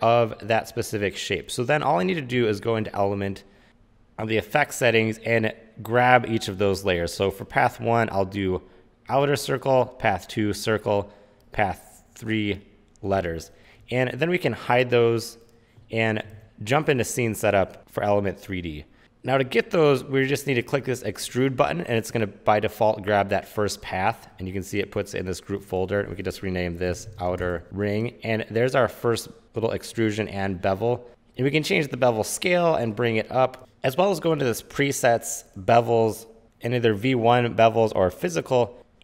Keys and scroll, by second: 17.9 super+s, 26.8-28.1 typing.